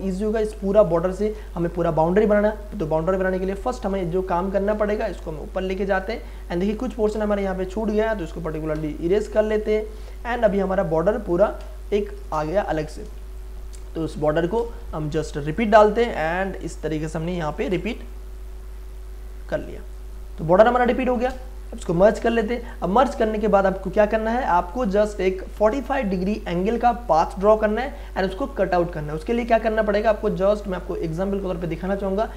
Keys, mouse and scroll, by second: 1.4 space, 1.6 ctrl+click, 4.0 space, 4.1 click, 4.4 space, 4.9-7.5 drag, 7.5 m, 7.9 click, 8.7 Delete, 9.5 ctrl+d, 10.0 v, 10.5 click, 11.4 ctrl+t, 12.2 Return, 12.8 click, 13.1 space, 13.4-15.6 ctrl+drag, 15.6-17.8 alt+drag, 17.7 ctrl+space, 17.9 ctrl+click, 18.3 ctrl+space, 19.9 click, 20.1 ctrl+space, 20.8 ctrl+click, 21.8 ctrl+e, 22.4 space, 22.7-26.9 ctrl+drag, 26.8 space, 27.0-32.3 ctrl+drag.